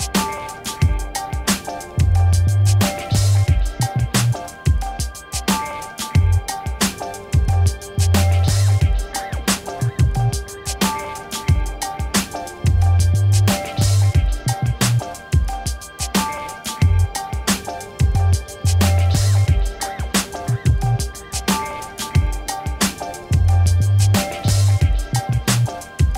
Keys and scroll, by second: 0.8-2.2 typing, 4.4 Return.